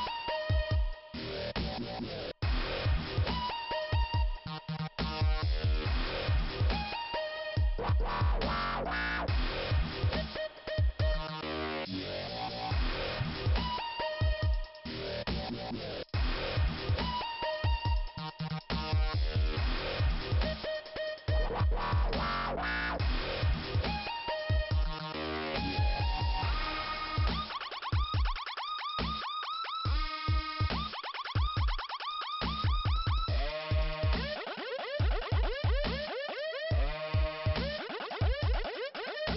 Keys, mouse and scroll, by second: 2.4 middle click, 4.9 click, 8.3 right click, 9.0 click, 10.6 scroll down 2, 12.0 middle click, 13.1 scroll up 1, 14.1 click, 14.8 click, 19.7 click, 21.2 scroll up 2, 23.2 click, 26.9-28.0 scroll down 1, 32.7 click, 33.3 right click, 36.0-37.2 scroll up 1, 37.7 click, 39.0 click.